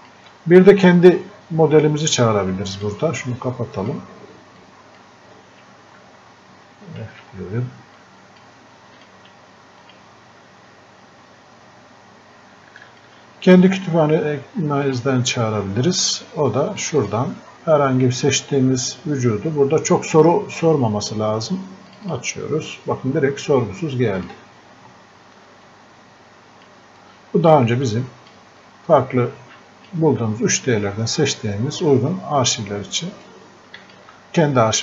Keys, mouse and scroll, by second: 2.3 click, 5.3 scroll up 1, 7.3 f, 8.0 click, 11.5 scroll up 1, 12.9 alt+click, 14.9 click, 21.9 click, 30.7 scroll down 1, 33.3-34.8 drag.